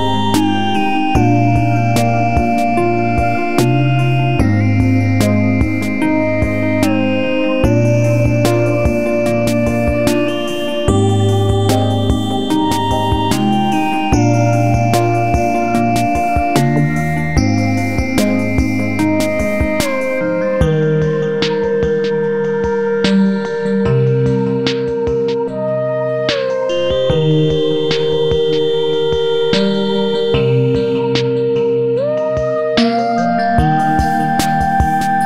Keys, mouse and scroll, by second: 0.7 click, 2.0 click, 4.1 click, 5.1 click, 6.2 click, 6.5-9.5 drag, 9.5 click, 11.4 c, 13.1 click, 13.4 scroll up 1, 13.6 click, 13.9 Up, 14.2 Right, 14.7 Up, 16.8 click, 17.1 Right, 17.3 Up, 17.8 Right, 18.0 Up, 18.8 click, 19.5 Left, 19.9 click, 20.7 scroll up 1, 21.0 scroll down 1, 21.0 scroll up 1, 21.7-23.0 drag, 23.0 F4, 23.8 click, 24.4-24.9 scroll up 1, 25.3 F4, 26.4-28.5 drag, 30.4 right click, 31.0 click, 31.9 right click, 32.1 click, 33.5 click, 34.1 ctrl+g, 34.4 click.